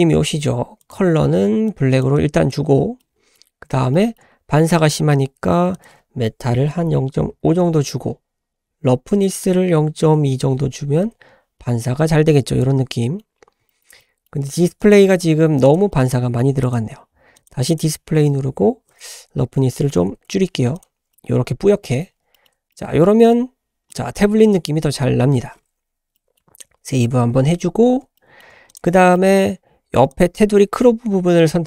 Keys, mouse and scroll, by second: 0.8 click, 3.0-3.3 middle drag, 3.9-4.2 shift+middle drag, 5.7-7.7 drag, 5.7-6.1 scroll up 1, 9.2-11.3 drag, 11.8-13.2 middle drag, 13.3 scroll up 1, 13.7 shift+middle drag, 14.0 middle click, 14.8 click, 15.6 click, 15.9 middle click, 16.6 click, 17.4 click, 17.7 click, 18.9-20.4 drag, 20.7 click, 21.1 scroll down 1, 21.2 middle click, 22.1 scroll down 1, 22.3 shift+middle click, 22.7 middle click, 23.9-24.6 middle drag, 26.1 middle click, 26.8 ctrl+s, 27.7-28.0 scroll up 2, 28.2 shift+middle drag, 28.7 click, 29.1 middle click, 30.1 click.